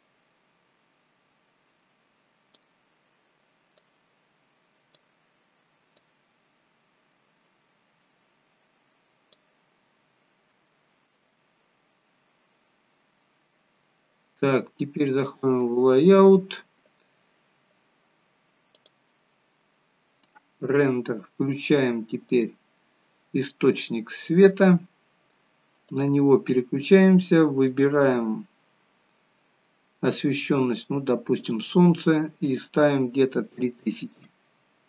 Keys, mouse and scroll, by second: 15.3 click, 15.3-16.8 scroll down 1, 19.8 click, 22.4 click, 23.9-25.3 scroll down 1, 25.8 click, 27.6 click, 31.5 click, 32.4 click.